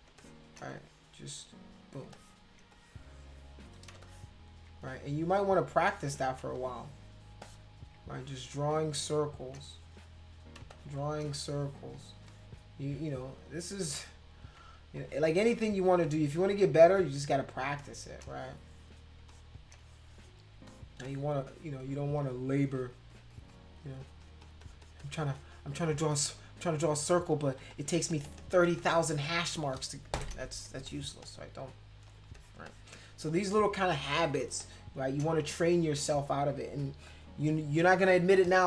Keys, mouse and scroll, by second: 0.1 space, 0.2 click, 0.8-1.8 drag, 2.1 space, 2.1 click, 2.7 click, 3.9 space, 4.0 click, 4.8 click, 5.8 space, 5.8 click, 6.6 click, 7.3 space, 7.4 click, 8.1 click, 8.9 space, 9.0 click, 9.6 click, 10.6 space, 10.7 click, 11.2 click, 11.9 space, 12.3 click, 13.0 click, 13.9 space, 14.0 click, 14.9 click, 15.9 space, 16.0 click, 16.8 click, 17.6 space, 17.8 click, 18.3 click, 19.2 space, 19.3 click, 19.8 click, 20.5 space, 20.7 click, 21.0 click, 22.2 click, 22.6 click, 22.9 click, 23.1 click, 23.3 click, 23.5 click, 23.8 click, 24.0 click, 24.2 click, 24.4 click, 24.6 click, 24.8 click, 25.0 click, 25.2 click, 25.3 click, 25.5 click, 26.1 click, 26.4 click, 26.6 click, 26.7 click, 26.8 click, 27.2 click, 27.3 click, 27.5 click, 27.6 click, 27.7 click, 27.9 click, 28.1 click, 28.3 click, 28.3 click, 28.5 click, 28.6 click, 28.8 click, 30.6 space, 30.8 click, 31.2-32.3 drag, 32.3 click, 32.7 click, 33.3 click, 34.0 click, 34.6 click, 38.3 space, 38.4 click.